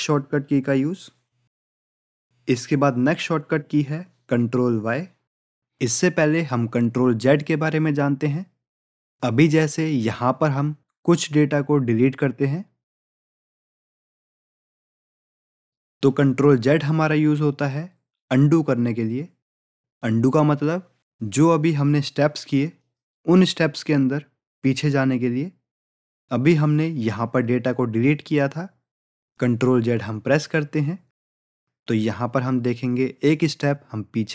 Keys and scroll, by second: 30.9 ctrl+z.